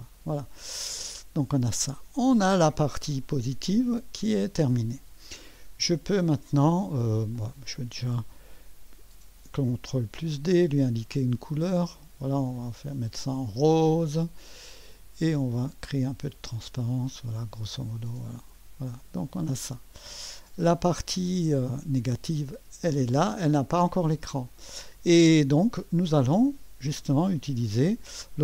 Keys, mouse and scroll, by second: 0.5-3.6 drag, 6.1 click, 7.6 click, 9.2 ctrl+d, 10.2 click, 11.5 click, 14.7 click, 16.1-17.4 drag, 18.4 click, 19.0 click, 19.7-20.7 drag, 21.9 click, 22.7 space.